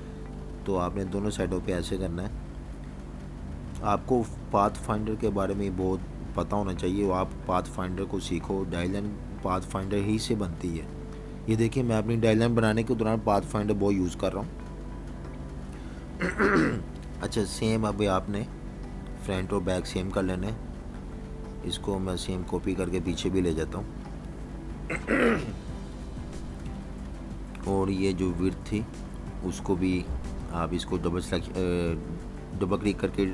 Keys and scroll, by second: 15.2-16.2 typing, 15.6 super+-, 19.1 Delete, 23.5 v, 25.1 Delete, 31.4 a.